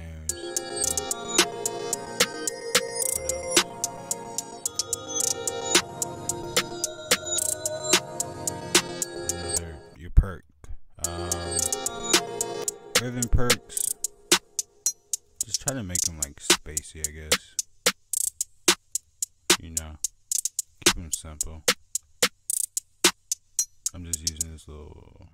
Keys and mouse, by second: 1.2 click, 1.2 right click, 1.3 F1, 1.3 right click, 1.5 F1, 1.5 right click, 2.0 click, 3.6 drag, 4.0 click, 6.4 F1, 6.4 click, 12.4 click, 24.2 click.